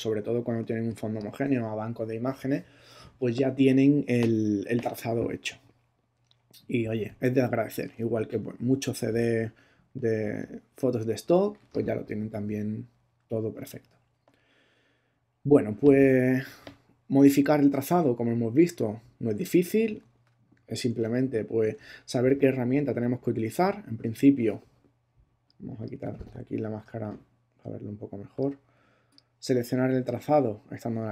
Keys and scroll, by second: 0.6 space, 20.8 ctrl+Tab.